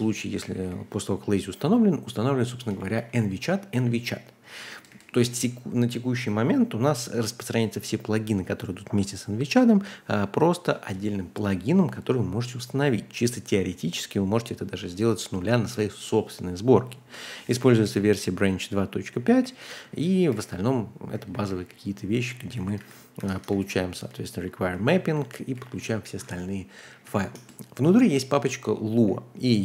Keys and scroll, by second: 0.9-5.4 typing, 17.0-19.5 typing, 19.9 ctrl+d, 20.3 ctrl+d, 21.1-23.5 typing, 24.7 k, 25.0 ctrl+u, 25.5 ctrl+u, 26.2 ctrl+h, 26.8 typing, 27.3 Return, 28.9-29.6 typing.